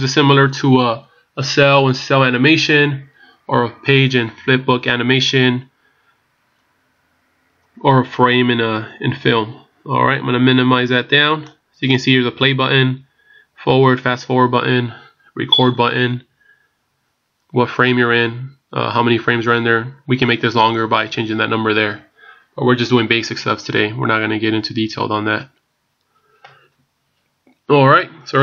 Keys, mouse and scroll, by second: 10.1 click.